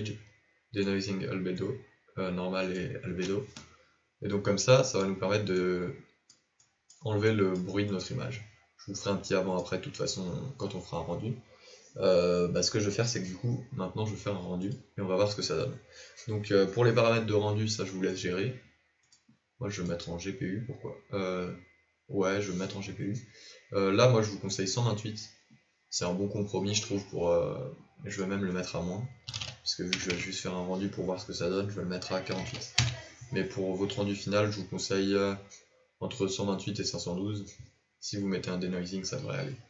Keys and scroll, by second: 30.0 BackSpace.